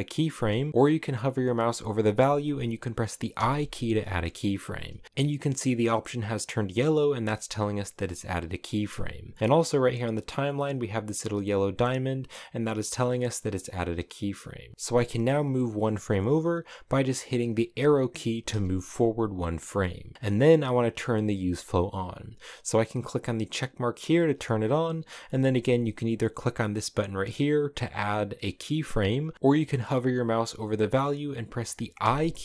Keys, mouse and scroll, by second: 9.4-12.5 drag, 12.5 right click, 13.6-14.7 drag, 14.7 Left, 18.1 Right, 23.1 click, 27.1-31.7 drag.